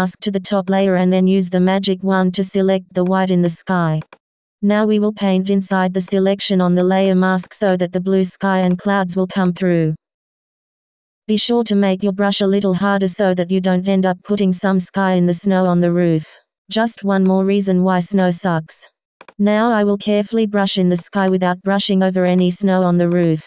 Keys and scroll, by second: 2.4 b, 3.8 x.